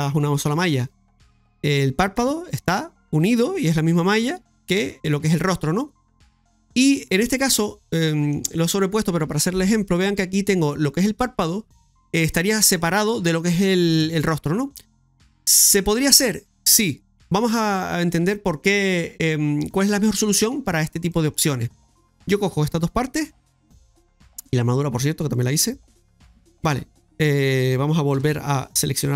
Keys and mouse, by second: 0.5 Tab, 1.4 middle click, 6.2 middle click, 7.8 middle click, 20.0 right click, 20.7 Tab, 21.0 middle click, 21.9 right click, 22.7 shift+right click, 23.3 shift+right click, 25.3 shift+right click, 25.9-26.7 typing, 28.2 KP_Divide.